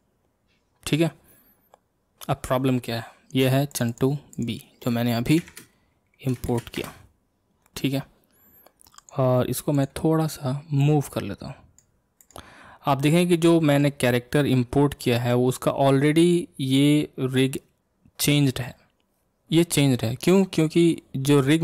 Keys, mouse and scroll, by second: 3.7 click, 3.9-6.9 drag, 9.0-9.9 drag, 10.8 click, 12.2 click, 12.6-13.0 scroll down 1, 13.0-15.8 middle drag, 15.8-18.8 scroll up 1.